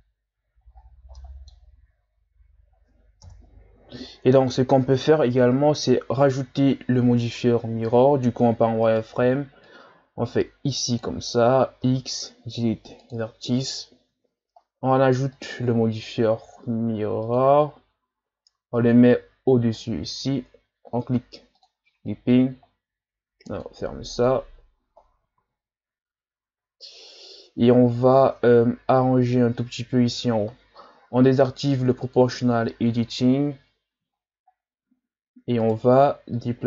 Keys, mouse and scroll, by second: 0.7-1.2 ctrl+scroll up 4, 1.2-3.2 middle drag, 3.2 KP_1, 4.1-5.0 scroll down 5, 6.1-7.1 ctrl+scroll down 1, 7.4 z, 8.9 right click, 9.2 b, 11.8 x, 14.1 Tab, 17.4 click, 18.8-19.8 drag, 21.6 click, 23.5-25.4 drag, 25.4 z, 26.1-26.7 scroll up 1, 26.7-28.4 shift+scroll up 10, 28.4 Tab, 32.0 click, 32.6-33.6 scroll down 8, 33.6-35.0 scroll up 6, 35.6 right click, 36.3-36.6 drag.